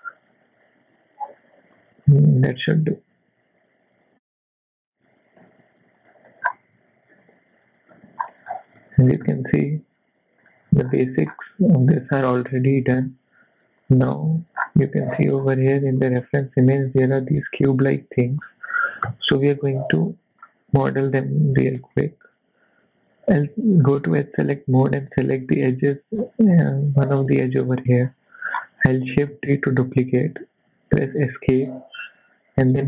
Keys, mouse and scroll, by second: 0.3 Tab, 1.7 click, 2.2 click, 3.2 s, 5.4 s, 6.2 Tab, 6.5 scroll down 2, 6.7 z, 7.1 middle click, 8.2-8.8 scroll down 7, 8.8 middle click, 10.4 click, 10.9-11.6 scroll up 4, 11.8 click, 12.5 middle click, 13.2 KP_1, 13.9 click, 14.2 Tab, 14.6 scroll up 3, 15.0 z, 15.4 scroll up 3, 16.0 shift+middle click, 17.9 scroll down 2, 19.7 click, 20.1 shift+middle click, 20.4 scroll up 2, 21.0 click, 21.7 scroll up 2, 21.9 shift+middle click, 23.2 z, 23.7 scroll down 3, 24.4 click, 25.0 middle click, 26.2-26.6 scroll down 6, 26.7 middle click, 27.6 KP_1, 28.0-28.7 scroll up 6, 29.3 shift+d.